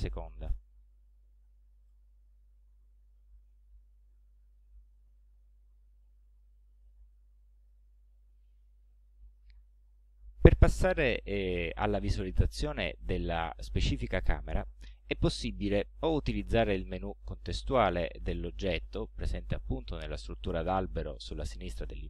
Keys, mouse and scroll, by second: 0.5 click, 1.9 click, 3.4-4.0 scroll down 4, 4.2 click, 4.9-5.6 scroll down 4, 6.1 right click, 7.0-7.8 scroll up 2, 7.8 scroll up 1, 8.4-9.6 middle drag.